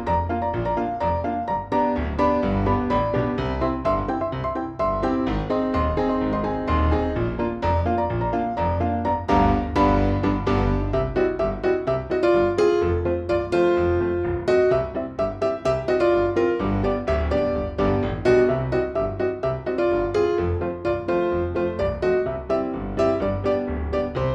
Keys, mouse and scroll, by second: 0.2 click, 1.2 click, 2.1-3.2 drag, 4.0 click, 4.8 click, 5.9 click, 9.3 ctrl+z, 11.2 click, 12.3 click, 13.6 click, 14.5 click, 15.9 click, 16.6 click, 17.5 click, 18.0 click, 19.1 click, 19.7 click.